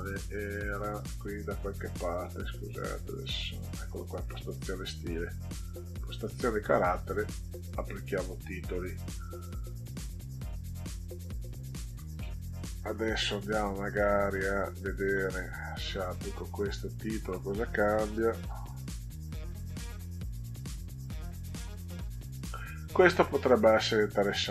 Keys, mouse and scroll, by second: 1.6 click, 3.5 click, 5.8 click, 7.0 click, 8.9 click, 11.8 click, 14.2 click, 15.9 click, 18.0 click, 19.4 click, 20.5 click, 23.6-24.0 drag.